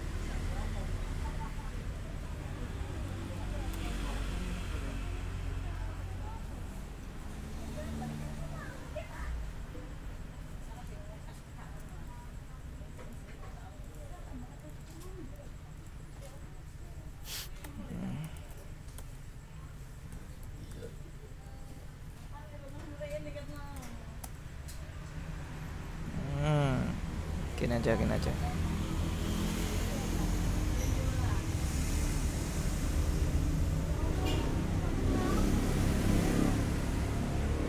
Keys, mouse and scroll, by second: 0.7-1.4 scroll down 2, 1.5-2.4 scroll up 2, 3.1 click, 3.8 Return, 4.7-6.9 scroll up 2, 6.9-8.5 scroll down 2, 9.2-10.7 scroll up 2, 10.8 click, 12.0 click, 13.0 click, 14.0 click, 14.7 click, 15.9 click, 17.8 ctrl+i, 18.3 ctrl+n, 18.6 ctrl+m, 19.2 ctrl+BackSpace, 20.0-21.3 typing, 23.4-24.2 typing, 25.3-26.6 scroll down 2, 28.2 click, 31.0 click, 33.0 scroll up 2, 33.3 scroll down 2, 33.4-34.9 scroll up 4, 36.2 click, 36.8-37.6 scroll up 2.